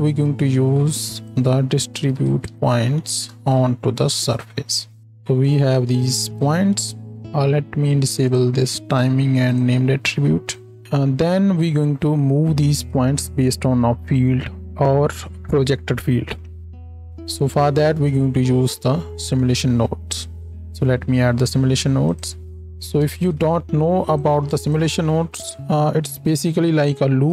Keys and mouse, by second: 1.1-4.5 drag, 4.5 middle click, 5.0 ctrl+shift+click, 5.5 ctrl+shift+middle click, 6.4-22.6 drag, 10.8-22.6 middle drag, 10.8-22.8 right drag, 20.5 shift+a, 22.8 ctrl+click, 23.2 ctrl+space, 23.2 ctrl+click, 26.1-27.3 drag, 26.1-27.3 middle drag, 26.1-27.3 right drag.